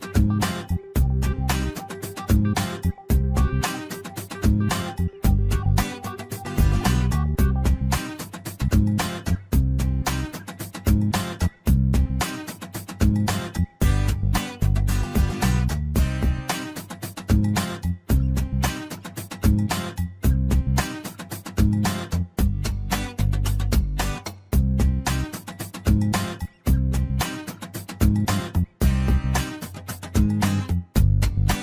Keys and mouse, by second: 0.3-1.7 drag, 2.0 shift+middle click, 2.5 click, 2.9 click, 3.0-4.6 drag, 5.0 shift+middle click, 6.2-7.3 drag, 7.6 shift+middle click, 8.2 click, 8.5 click, 8.7-9.9 drag, 10.3 shift+middle click, 11.0 click, 11.5-12.7 drag, 13.1 shift+middle click, 15.5 shift+middle click, 19.4 shift+middle click, 20.0 click, 21.3-23.9 drag, 24.4 click, 25.0-26.7 drag, 27.8-30.0 drag, 30.9 shift+middle click.